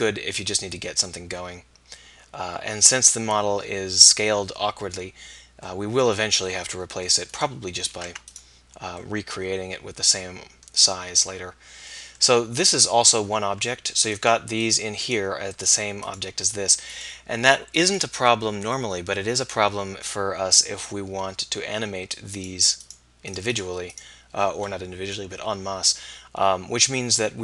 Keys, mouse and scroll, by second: 2.5-5.9 middle drag, 8.1 Tab, 8.5-9.8 middle drag, 10.0 middle drag, 13.5 Tab, 23.6-25.8 drag.